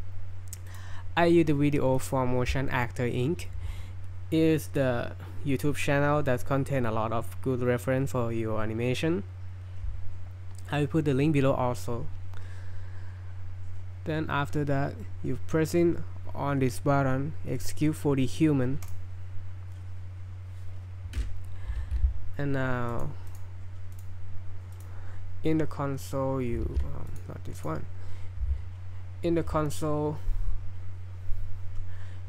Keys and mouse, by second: 18.8-32.2 drag.